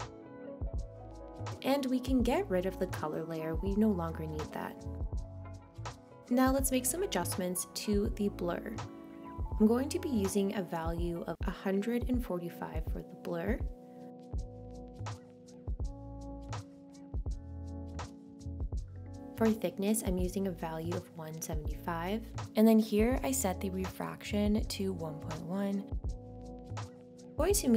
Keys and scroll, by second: 24.1 1, 26.2 Return.